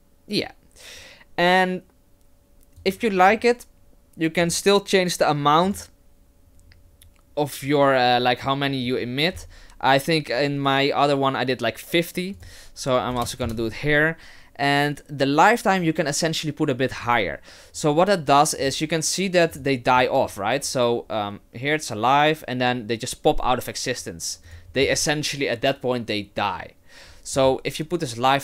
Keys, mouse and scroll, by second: 2.8 click, 4.4 click, 5.6 click, 12.4 click, 18.6 click, 19.5 click, 24.5 click.